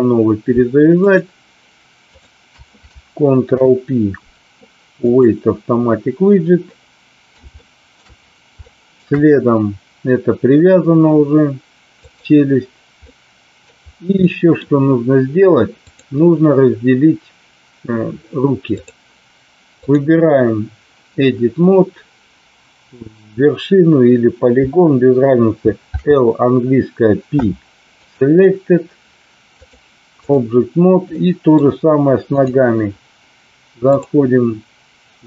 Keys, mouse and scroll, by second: 1.1 shift+click, 2.1 shift+drag, 3.4 ctrl+p, 6.7 middle click, 7.4-7.9 shift+middle drag, 8.7-9.1 shift+middle drag, 12.1 click, 13.1-13.7 middle drag, 14.2-14.5 middle drag, 16.0-18.9 drag, 25.8 l, 27.3 p, 29.7 click, 31.2-31.6 middle drag, 32.3 click, 33.8-35.2 drag.